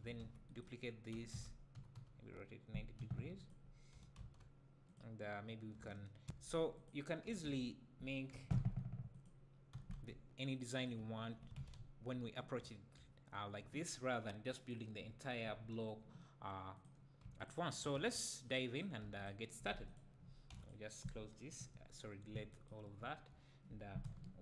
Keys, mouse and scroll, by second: 0.2 shift+d, 0.6 right click, 1.1 r, 3.4 click, 3.9 g, 4.9 click, 6.3 shift+d, 6.9 click, 7.3 r, 9.3 click, 9.8 g, 10.9 click, 11.0 `, 11.6 alt+a, 16.8 click, 17.4 shift+click, 17.7-18.0 shift+drag, 18.0 x, 18.8 click, 19.1 x, 19.9 click, 20.5 x, 21.5 KP_1, 22.2 scroll up 1, 23.0 `, 24.1 KP_1.